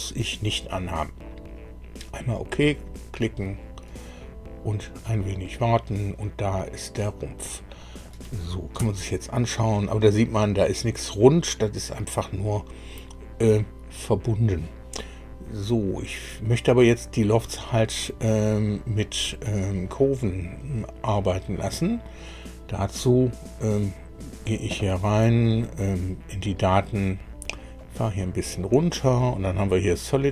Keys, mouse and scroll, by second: 2.3 click, 6.6-8.2 middle drag, 8.8 KP_1, 21.7 click, 23.6 click, 27.8-29.5 drag.